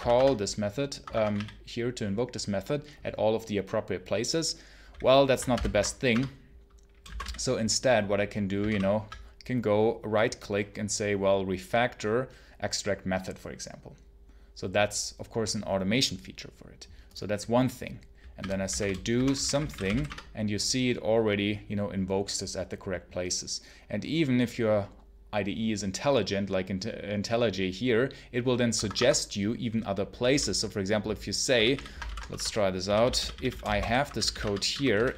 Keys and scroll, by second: 0.0-1.7 typing, 0.8 Escape, 5.4 ctrl+alt+n, 6.0 Return, 6.7-7.6 typing, 8.5 Menu, 18.0-20.3 typing, 28.6 Escape, 30.0 k, 30.2 k, 31.4 w, 31.6 w, 31.9 ctrl+alt+n, 32.2 Return, 32.7-35.1 typing, 34.3 Return.